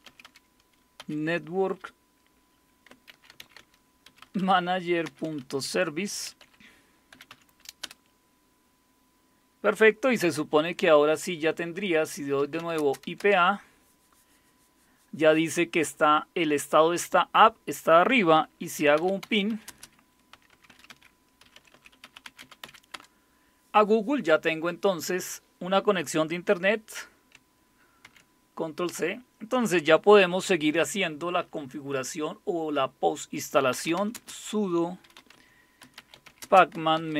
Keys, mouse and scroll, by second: 0.0-1.0 typing, 2.8-8.3 typing, 12.2-13.5 typing, 18.5-23.1 typing, 28.0 ctrl+c, 33.3-37.1 typing.